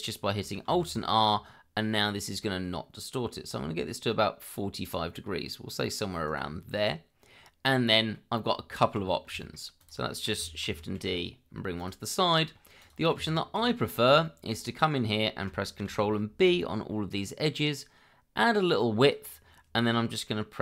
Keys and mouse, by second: 0.7 alt+r, 6.2 click, 6.8-8.1 middle drag, 8.5 Tab, 9.4 shift+middle click, 9.8 shift+click, 10.1 shift+middle click, 10.6 shift+d, 11.0 y, 12.2 middle drag, 12.8 click, 13.1 Tab, 14.2 shift+middle click, 15.8 ctrl+b.